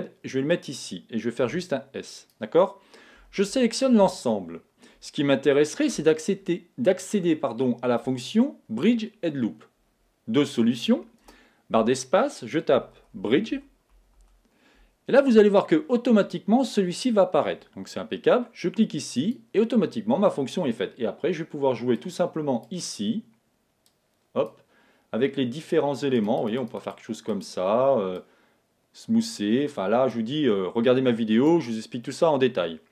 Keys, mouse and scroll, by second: 0.6-4.1 drag, 1.4 s, 3.1 a, 3.4 a, 11.2 space, 21.9-23.6 drag, 23.8-25.5 drag, 26.1-29.8 drag, 30.1-32.0 drag, 32.0-32.9 middle drag.